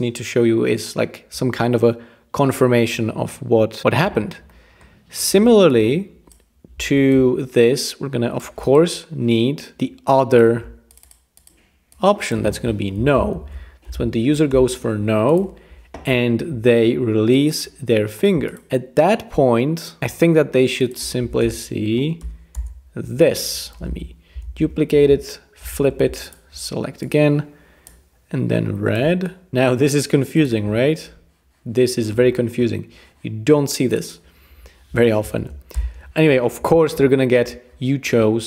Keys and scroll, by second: 13.0 Left, 13.3 shift+super+BackSpace, 13.6-14.4 typing, 14.5 Return, 21.4 Return, 22.2 BackSpace, 22.5 Return, 24.4 super+d, 25.6 shift+v, 35.4-36.1 typing.